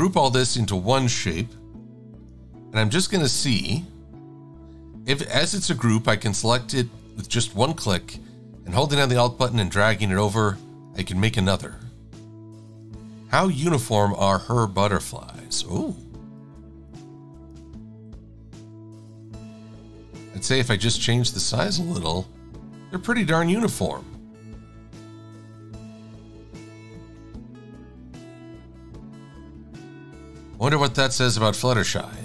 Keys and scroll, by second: 13.1 v, 16.6 e, 17.8 v, 27.4 Left.